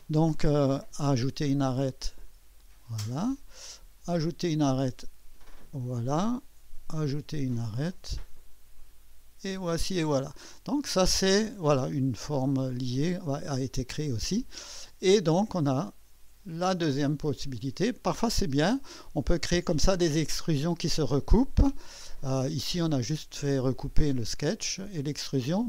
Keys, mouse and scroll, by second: 1.4 click, 2.6 click, 2.6 typing, 4.1 click, 5.7 click, 7.1 click, 8.8 click, 10.1 click, 12.5 click, 15.4-17.2 drag, 17.6-18.2 drag, 22.3 click.